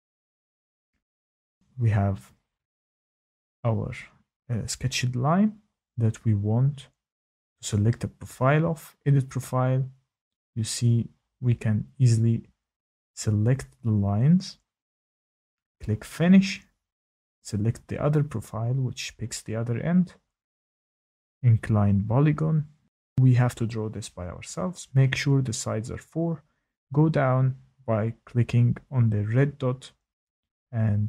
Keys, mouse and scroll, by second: 0.0 click, 2.8 shift+middle click, 8.6 click, 9.9 click, 11.9 click, 14.6 click, 15.2 click, 15.8 click, 17.7 click, 19.0 click, 20.0 click, 23.0 click, 26.7 click, 30.4-30.7 typing.